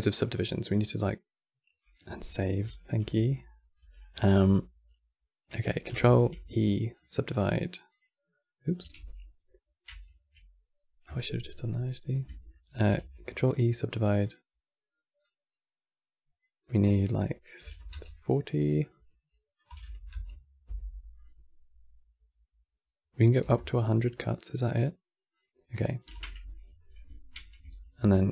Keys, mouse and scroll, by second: 2.0 ctrl+s, 3.0 click, 3.3 middle drag, 3.5 Tab, 3.9-5.8 shift+middle drag, 5.8 ctrl+e, 7.6 click, 8.7 ctrl+z, 9.8 ctrl+z, 10.7 F9, 12.6 ctrl+e, 13.9 click, 20.9 click, 25.1 click, 25.8 ctrl+a, 26.4 a, 26.6 a, 27.2 a.